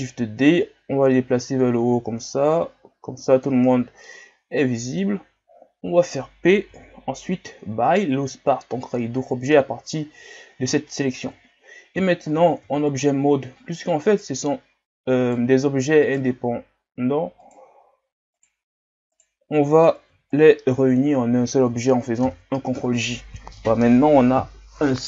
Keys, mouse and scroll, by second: 1.1-3.7 drag, 3.7 scroll down 4, 4.0-5.3 middle drag, 5.3 scroll up 2, 6.7 p, 11.2 KP_1, 12.2 shift+scroll up 4, 12.7 Tab, 14.1 right click, 15.3 right click, 16.1 right drag, 17.5 right click, 18.4 right click, 19.2-20.0 right drag, 20.0 b, 22.2 ctrl+j.